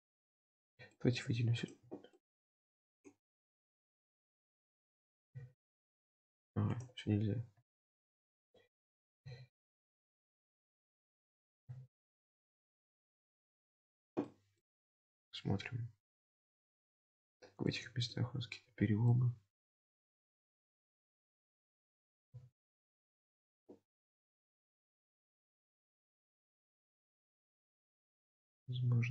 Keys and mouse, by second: 0.2 middle click, 4.4 shift+middle click, 6.9 ctrl+z, 9.2 g, 14.3 middle click, 14.7 Tab, 15.1-16.3 middle drag, 16.4 Tab, 17.3 middle click, 17.7 Tab, 18.1-19.1 middle drag, 19.2 Tab, 21.5 click, 22.2 g, 24.4 Tab, 24.9-26.1 middle drag, 26.3 Tab, 28.1 shift+middle click.